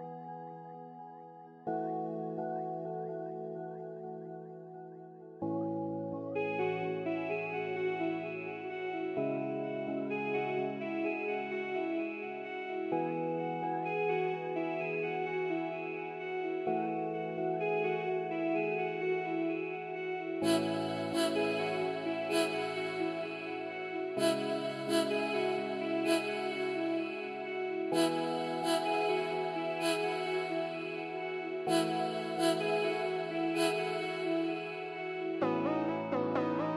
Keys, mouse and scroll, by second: 1.2 middle click, 1.3 scroll down 1, 1.6 middle click, 1.9-4.9 scroll up 1, 5.3 scroll down 1, 5.6 middle click, 7.2-10.4 scroll up 1, 11.1-11.4 scroll up 1, 11.4-11.9 scroll down 1, 11.9 scroll up 1, 12.1 middle click, 14.0 scroll down 1, 14.1 middle click, 25.6 middle click, 25.7 scroll down 1, 26.3 middle click, 30.4 middle click, 33.0 middle click, 33.0 scroll up 1.